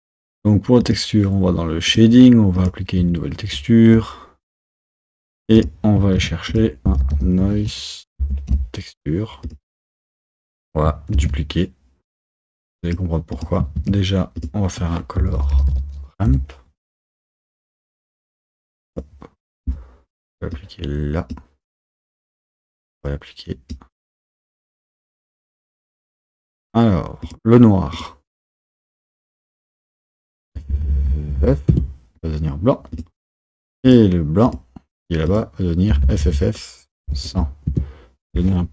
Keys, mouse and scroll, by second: 1.0 click, 2.0 click, 2.8-8.6 drag, 8.6 shift+a, 11.2 shift+d, 16.4 shift+a, 21.4-23.8 drag, 27.3-31.8 drag, 31.8 f, 34.0-37.8 drag, 37.8 KP_0.